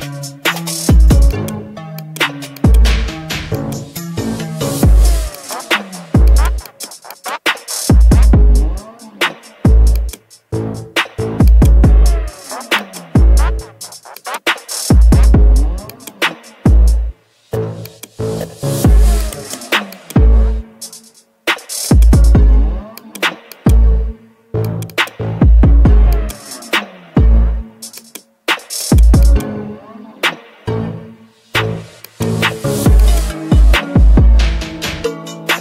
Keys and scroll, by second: 4.7 ctrl+g.